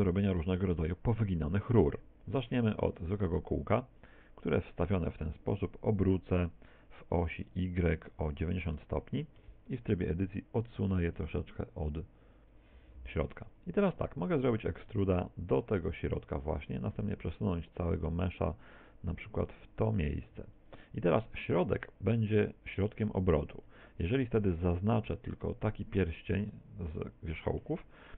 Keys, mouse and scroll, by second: 0.4 right click, 0.7 x, 1.5 shift+a, 4.8 r, 9.5 Tab, 10.7 click, 14.3 e, 16.9 ctrl+click, 16.9 a, 17.8 a, 17.8 g, 20.7 ctrl+click, 23.7 a, 23.9 z, 24.3 b, 26.5 middle click.